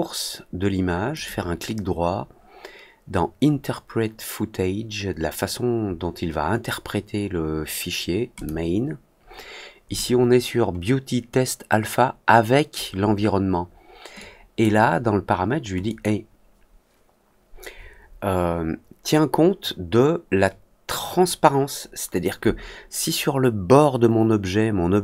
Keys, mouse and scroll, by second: 1.1 right click, 8.3 click, 14.1 click, 15.8 click.